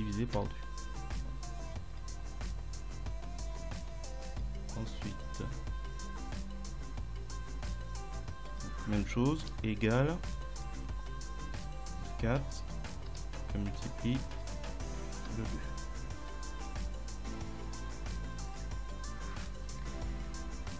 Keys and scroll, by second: 0.4 Return, 9.5 =, 11.6 F4, 13.1 *, 15.2 Return, 19.6 ctrl+Down.